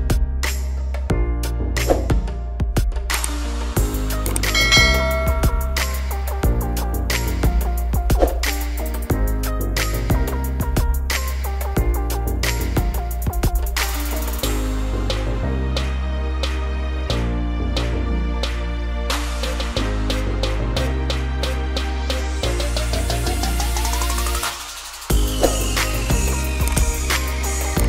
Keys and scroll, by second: 13.0 Delete, 18.0 ctrl+d, 20.5 ctrl++, 21.8 ctrl+-, 26.3 F9.